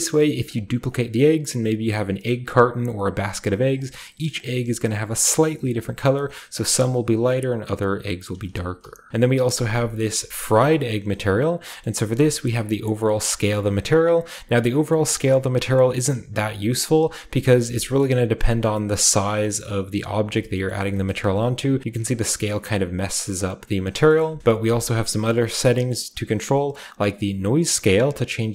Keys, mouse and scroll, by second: 0.4 middle click, 0.9 middle click, 2.9 scroll down 1, 3.7 middle click, 4.3 middle click, 4.8 middle click, 5.3 middle drag, 5.7-8.4 right drag, 8.4 a, 9.0 x, 9.1-9.7 shift+drag, 9.1-10.1 shift+right drag, 9.1 shift+scroll down 2, 9.3-10.2 shift+scroll up 4, 10.0 shift+middle click, 10.2 shift+scroll, 10.3 shift+middle click, 10.9 shift+middle click, 10.9 shift+scroll up 2, 10.9 shift+scroll, 11.8-15.9 shift+middle drag, 12.4-16.1 shift+drag, 17.6 a, 17.9-19.4 scroll up 1, 19.4 scroll up 1, 19.6 middle click, 20.6 shift+middle drag, 21.0 shift+middle click, 21.8-23.7 drag, 23.7 middle click, 24.4 KP_0, 26.7-28.5 drag.